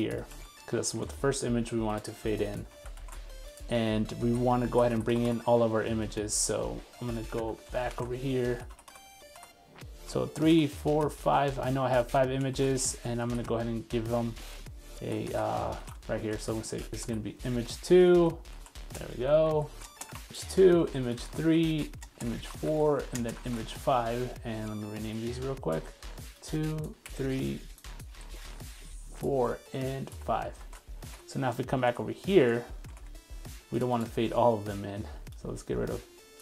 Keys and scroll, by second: 0.7 super+1, 2.7 super+v, 3.0 super+s, 6.5 super+z, 7.5 super+z, 20.2 super+v, 20.7 super+c, 30.6 super+s, 31.2 super+Tab, 31.9 super+Tab.